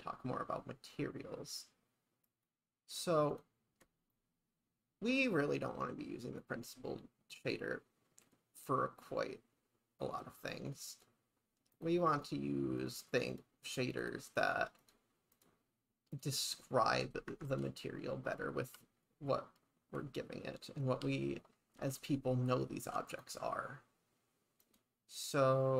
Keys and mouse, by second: 3.4 click, 4.1-10.7 middle drag, 10.9 click, 11.7 click, 12.2 click, 12.8 click, 13.3 click, 14.1 drag, 14.8 click, 15.3 click, 17.3 shift+`, 24.7 click.